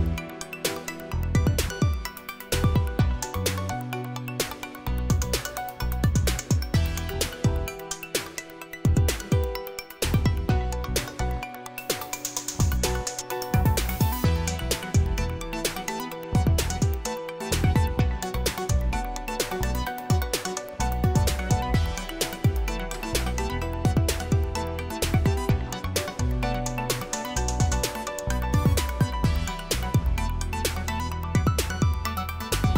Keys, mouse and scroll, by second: 11.7 click, 12.1 click, 13.6-14.2 typing, 16.5 click, 19.0-19.9 typing, 21.0-22.3 typing, 22.8 Return, 28.0 click, 29.1 click, 29.9-30.8 typing.